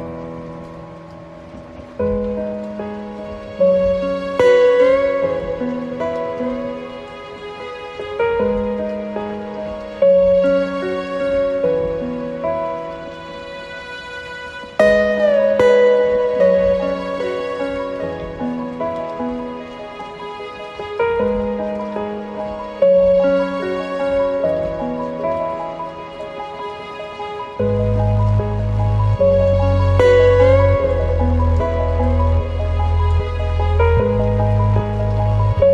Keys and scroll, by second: 0.4 ctrl+space, 0.9 ctrl+z, 3.5 ctrl+z, 10.4 ctrl+z, 25.7 ctrl+space, 28.8 ctrl+z, 31.2 ctrl+space, 33.3 ctrl+0.